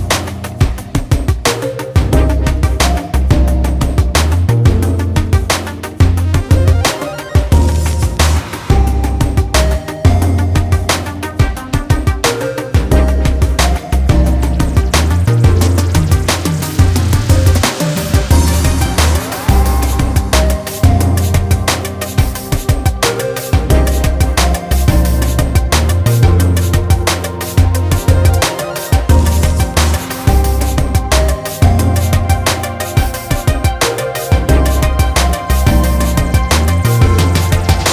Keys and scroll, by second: 4.1 ctrl+d, 5.0 ctrl+space, 16.8 ctrl+space, 17.3 ctrl+space, 17.3-18.4 ctrl+space.